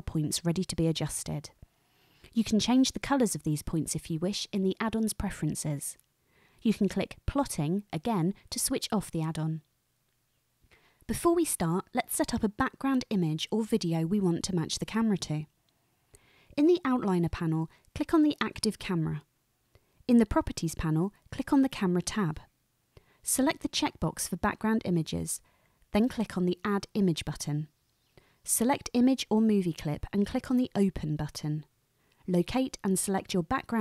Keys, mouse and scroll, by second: 2.1-3.0 drag, 8.7 click, 18.4 click, 21.7 click, 24.0 click, 25.1 click, 26.6 click, 28.9 click.